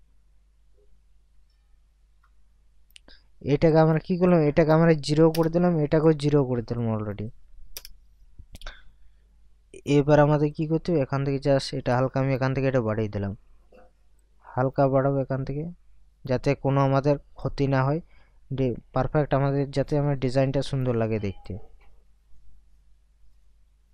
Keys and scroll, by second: 5.4 0, 7.8 0.